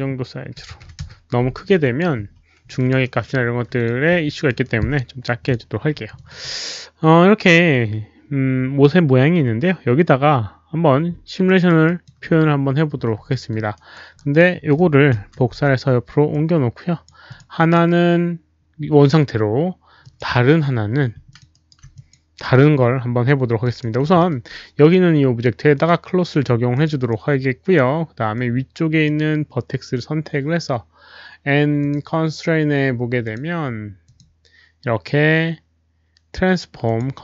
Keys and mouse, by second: 0.0-2.6 typing, 0.9 Return, 0.9 alt+click, 0.9 middle click, 1.8 alt+click, 1.9 middle click, 2.7 alt+click, 3.0 alt+right click, 3.2 middle click, 3.7 middle click, 3.7 alt+click, 4.2 alt+click, 4.6 alt+right click, 5.4 Return, 5.4 alt+click, 5.4 alt+right click, 5.4 f, 5.4 KP_1, 5.4 KP_Decimal, 6.1 alt+click, 11.4 Return, 11.4 alt+right drag, 11.4 f, 11.8 alt+click, 12.9 alt+click, 12.9 alt+right click, 13.2 alt+middle drag, 13.2 alt+click, 13.7 alt+right drag, 14.1 alt+click, 14.1 alt+middle click, 15.1 alt+click, 15.1 alt+right click, 15.1 alt+middle click, 15.2 ctrl+d, 15.2 alt+click, 15.2 alt+right click, 15.2 alt+middle click, 15.5 ctrl+d, 15.5 alt+click, 15.5 alt+right click, 15.5 alt+middle click, 15.5 w, 16.2 ctrl+d, 16.2 alt+right click, 16.2 alt+middle click, 16.2 w, 16.3-17.0 alt+drag, 17.2 alt+click, 17.5 ctrl+d, 17.5 alt+drag, 17.5 alt+right click, 17.5 alt+middle click, 17.5 w, 20.0 ctrl+d, 20.0 alt+drag, 20.0 alt+right click, 20.0 alt+middle click, 20.0 w, 21.2 alt+click, 21.5 alt+right drag, 21.6 ctrl+d, 21.6 w, 21.9 drag, 23.6 alt+drag, 23.7 alt+right click, 23.7 ctrl+d, 23.7 w, 24.1 alt+middle click, 25.7 alt+click, 25.7 alt+middle click, 25.7 alt+right click, 25.7 w, 26.7 alt+click, 26.7 alt+middle click, 27.0-27.7 alt+right drag, 27.0 alt+middle click, 28.3-29.0 alt+drag, 31.7 alt+click, 32.4 right click, 32.4 alt+middle click, 33.2 click, 34.0 click, 34.0 alt+middle click, 36.8 click.